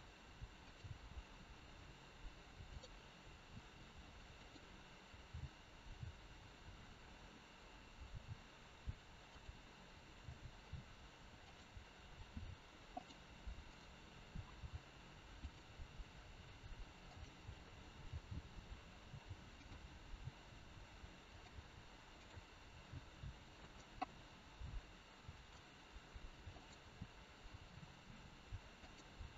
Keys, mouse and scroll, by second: 2.6 click, 3.3 r, 5.3 g, 13.0 g, 13.0 r, 13.5 click, 14.5 g, 16.0 r, 19.5 g, 20.0 g, 22.2 click, 22.6 g, 24.0 middle click, 26.5 click, 27.5 g.